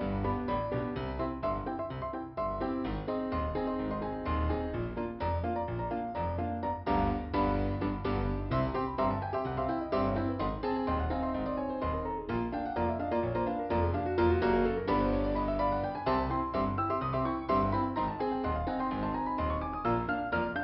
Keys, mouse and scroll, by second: 3.2 middle click, 4.2-5.3 scroll up 2, 5.3 click, 7.4 scroll down 1, 11.6 click, 14.3 scroll up 1, 15.0 middle click, 16.8 click.